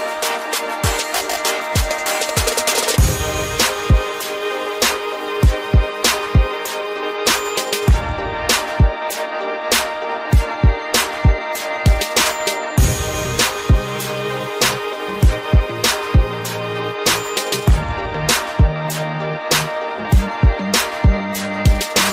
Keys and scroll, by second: 11.1 ctrl+g, 12.3 ctrl+alt+shift+e.